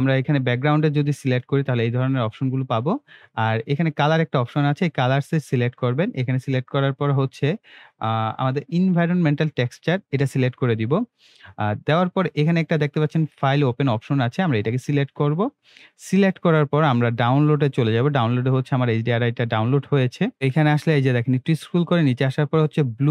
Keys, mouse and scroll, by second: 0.2 click, 1.0 click, 9.7 click, 14.6 click, 17.8 click, 19.8 scroll up 2, 21.3-23.1 scroll up 2.